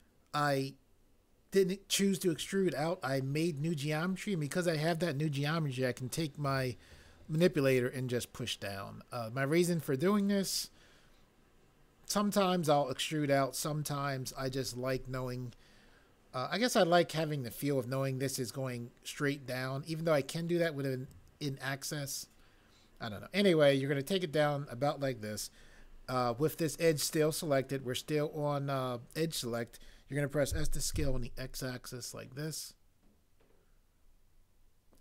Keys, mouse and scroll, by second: 30.3-31.5 typing.